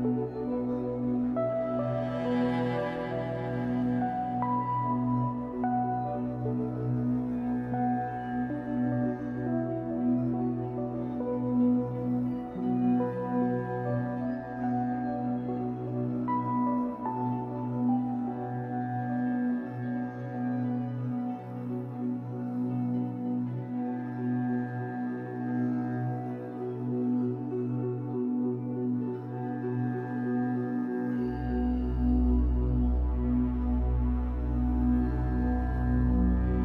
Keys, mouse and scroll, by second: 0.8 click, 1.3 g, 2.3 right click, 2.8 b, 4.9 click, 5.7 g, 6.6 click, 6.8 z, 7.4 scroll down 2, 7.5-22.7 middle drag, 9.1-9.8 scroll down 4, 10.1 Tab, 10.9-11.2 scroll up 2, 12.7 scroll down 1, 13.8 ctrl+s, 14.9-15.2 scroll up 1, 16.7 scroll up 1, 18.6 scroll up 1, 20.0 Tab, 20.3 scroll up 1, 21.0-21.3 scroll up 1, 22.7-25.4 drag, 25.4 KP_1, 25.8 scroll down 1, 26.5-30.4 shift+middle drag, 27.3 scroll up 1, 27.5 z, 28.2-28.6 scroll up 2, 30.4-34.6 drag, 31.7 shift+d, 35.9 b.